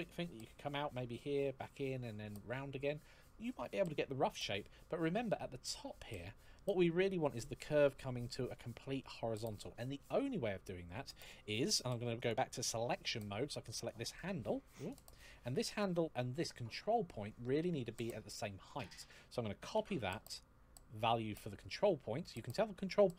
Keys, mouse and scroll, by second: 4.6 scroll down 1, 4.7-5.4 scroll up 1, 11.9 click, 13.6 right click, 14.6 click, 18.5 click, 19.5 ctrl+c.